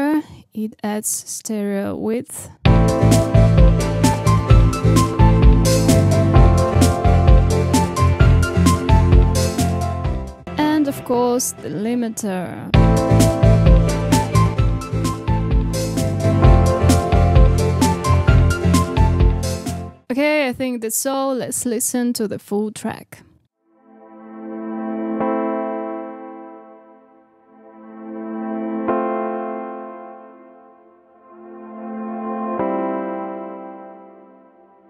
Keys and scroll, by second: 2.7 space, 10.2 space, 12.6 space, 19.8 space, 23.4 space.